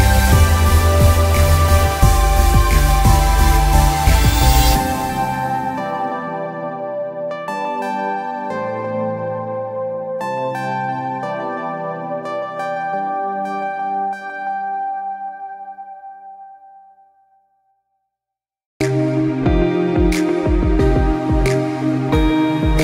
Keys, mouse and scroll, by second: 0.1 z, 0.4 alt+scroll down 1, 0.6 click, 0.7 space, 1.3 s, 1.5 s, 6.6 alt+Num_Lock, 6.6 alt+scroll up 1, 7.7-8.1 scroll up 1, 8.1 click, 8.8 alt+scroll up 2, 11.0 space, 11.1 click, 11.4 space, 13.2 click.